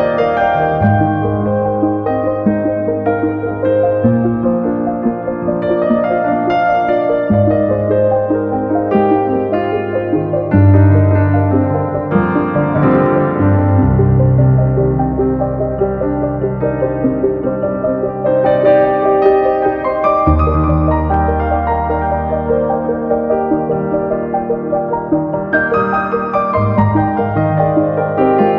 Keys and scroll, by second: 1.1 super+v, 2.8 super+v, 4.9 super+v, 6.8 super+v, 9.9 super+v, 13.1 super+c, 13.2 super+v, 15.5 super+v, 17.8 super+v, 20.1 Page_Up, 20.7 super+v, 23.0 super+v.